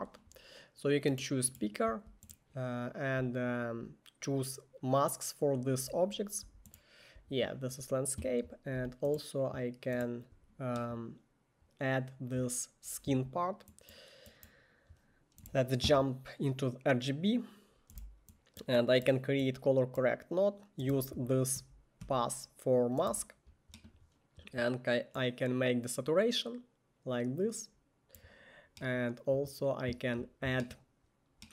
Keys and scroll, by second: 15.6 1, 18.1 c, 21.0-23.2 typing.